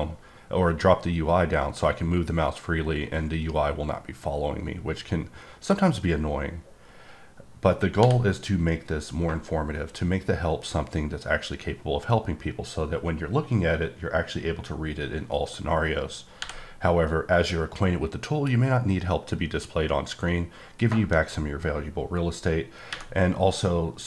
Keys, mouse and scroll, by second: 8.0 h, 16.4 h.